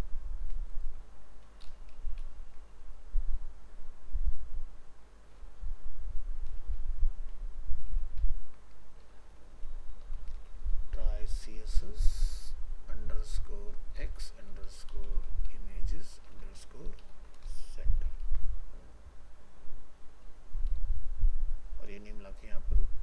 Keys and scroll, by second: 2.2 ctrl+v, 6.8 ctrl+z, 18.2 ctrl+c.